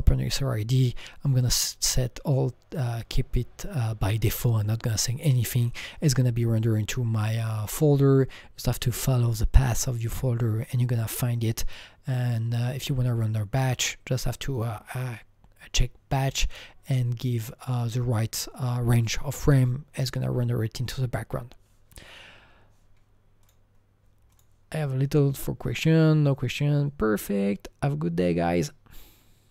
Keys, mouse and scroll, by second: 5.6 click, 14.5 click, 17.2 click, 23.4-24.5 click, 24.3 click.